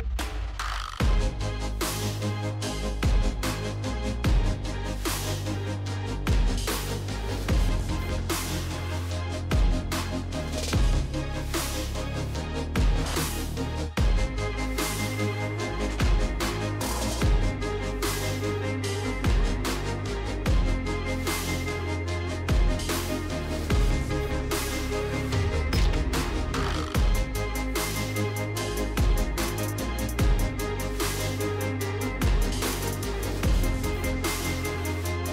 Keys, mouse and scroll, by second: 0.6 click, 1.2-6.5 typing, 1.4 click, 8.0-9.2 typing, 12.3 click, 12.7 click, 13.1-13.8 typing, 13.3 click, 13.7 click, 15.9 alt+click, 16.1-19.9 typing, 19.4 click, 21.2 space, 21.5 space, 22.6 space, 22.9 space, 23.7 space, 24.2 middle click, 24.3 middle click, 24.3 middle click, 24.6 middle click, 24.6 middle click, 25.1 click, 25.6 click, 25.9 right click, 27.4 click, 28.6 click, 29.4 click, 30.2 click, 31.9 click, 33.6 click, 35.0 click.